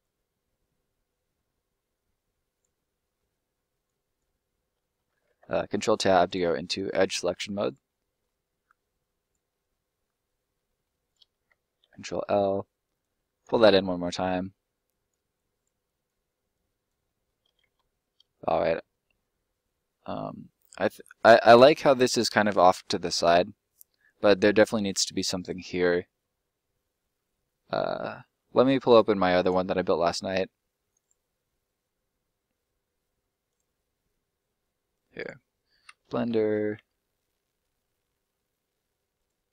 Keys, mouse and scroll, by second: 0.0 click, 2.7 middle click, 3.7 right click, 4.7 middle click, 6.2 click, 7.6 right click, 7.8 middle click, 8.6 click, 9.5 middle click, 11.0 right click, 11.8 ctrl+l, 13.0 click, 13.5 middle click, 14.9 click, 16.5 click, 17.0 middle click, 17.4-18.0 scroll down 2, 18.0 middle click, 20.9 middle click, 24.7 scroll up 1, 25.0 middle click, 29.3 click, 33.4 click, 35.7 b, 35.9 e, 36.3 d, 36.7 Return, 39.1 click.